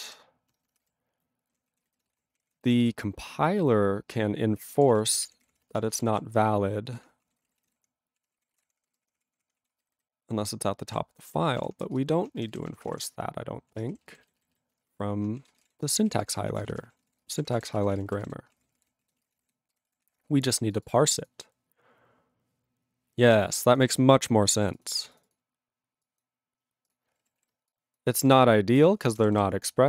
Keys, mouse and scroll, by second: 0.0-1.5 typing, 1.8 ctrl+a, 1.8 ctrl+space, 1.9 ctrl+n, 2.3 alt+w, 2.4 ctrl+e, 2.7 alt+b, 4.8 alt+d, 4.9-6.8 typing, 7.2 ctrl+a, 7.3 ctrl+p, 7.4 ctrl+space, 7.4 ctrl+e, 7.6 ctrl+n, 7.7 ctrl+g, 7.8 ctrl+p, 8.2 ctrl+e, 8.3 ctrl+space, 8.4 ctrl+p, 8.6 ctrl+e, 8.6 ctrl+p, 8.9 ctrl+g, 8.9 ctrl+p, 9.6 ctrl+a, 9.7 ctrl+space, 9.8 ctrl+n, 10.9 ctrl+w, 11.5 ctrl+p, 11.6 ctrl+e, 11.8 ctrl+BackSpace, 12.5 ctrl+n, 12.5 ctrl+a, 12.7 ctrl+k, 12.9 ctrl+p, 13.7 ctrl+e, 13.9 ,, 14.2 alt+b, 14.8 alt+^, 15.5 ctrl+space, 16.1 ctrl+s, 16.2 ctrl+g, 16.5 ctrl+a, 16.6 ctrl+space, 16.7 ctrl+e, 16.7 ctrl+n, 16.8 ctrl+e, 17.1 ctrl+g, 17.2 ctrl+space, 17.3 ctrl+a, 17.3 ctrl+p, 17.5 ctrl+g, 17.6 ctrl+e, 17.8 ctrl+a, 17.8 ctrl+space, 18.0 ctrl+n, 18.1 ctrl+e, 18.2 ctrl+g, 18.5 ctrl+space, 18.5 ctrl+p, 18.7 ctrl+g, 18.8 ctrl+e, 19.0 ctrl+a, 19.1 ctrl+space, 19.2 ctrl+e, 19.2 ctrl+n, 19.3 ctrl+e, 19.7 ctrl+g, 20.0 ctrl+s, 20.7 click, 20.8 click, 20.8 double click, 20.9 double click, 21.1 click, 21.2 click, 21.2 double click, 23.7 click, 23.8 click, 23.8 double click, 23.9 double click, 24.7 click, 24.7 double click, 24.8 double click, 25.1 click, 25.2 click, 25.2 double click, 25.3 double click, 26.0 click, 26.2 click, 26.9 click, 26.9 click, 27.4 ctrl+s, 27.7 click, 27.9 click, 28.3 click, 28.3 click, 28.8 ctrl+a, 29.0 ctrl+space, 29.0 ctrl+p, 29.3 ctrl+w, 29.4 ctrl+n.